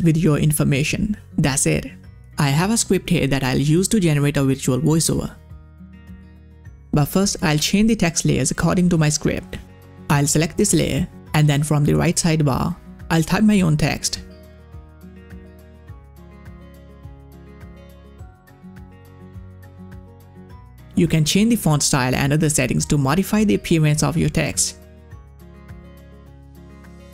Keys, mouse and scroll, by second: 7.0 click, 9.6 click, 12.3 click, 15.3 ctrl+a, 15.5-17.8 typing, 19.9 c, 21.1 click, 21.9 ctrl+v, 22.7 click, 23.7-26.1 drag, 26.6-27.1 typing.